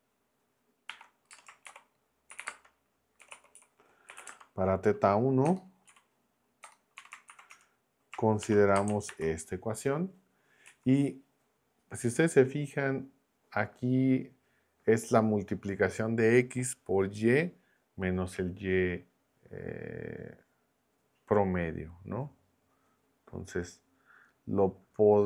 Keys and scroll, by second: 0.9-7.3 typing, 7.5 Return, 8.4 shift+3, 8.7 space, 9.1 super+v, 10.7 Down.